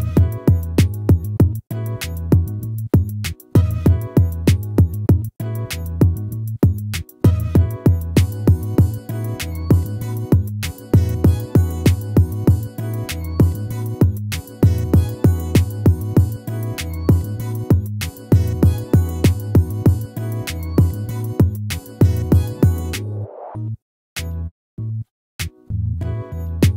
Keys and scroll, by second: 12.3 ctrl+-, 14.7 ctrl++, 17.1 ctrl+-, 17.3 ctrl++, 21.1 ctrl+-, 24.9 ctrl++.